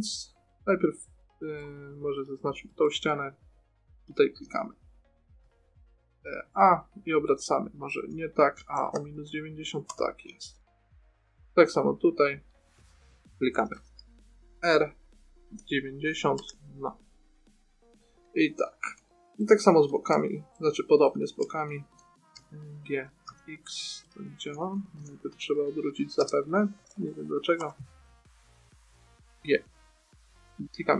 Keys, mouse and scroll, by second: 1.9 middle click, 4.2 a, 4.4 a, 5.7 r, 10.8-12.5 middle drag, 12.8 middle click, 14.1 r, 17.4-20.1 middle drag, 22.7 g, 24.9-26.5 typing, 28.4-29.9 drag, 29.6 g.